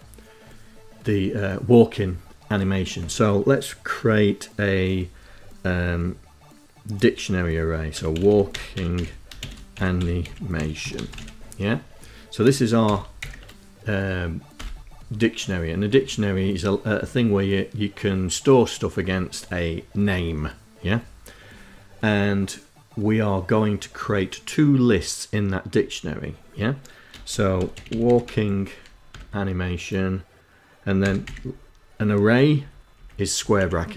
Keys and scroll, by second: 7.0-11.0 typing, 12.2 shift+[, 12.5 shift+], 13.9 Return, 26.7-28.1 typing, 28.4 Tab, 30.4 [, 30.6 ], 31.9 Left, 32.3 Left, 32.7 Right, 32.9 Right, 33.5 Left.